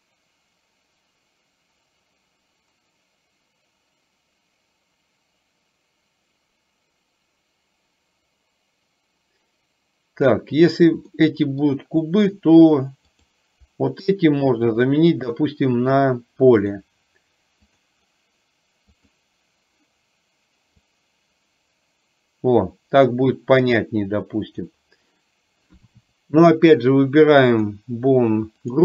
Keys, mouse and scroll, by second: 11.3 middle click, 13.2 click, 14.8 shift+click, 16.8-17.9 drag, 19.1 click, 20.9-24.8 drag, 27.6 click.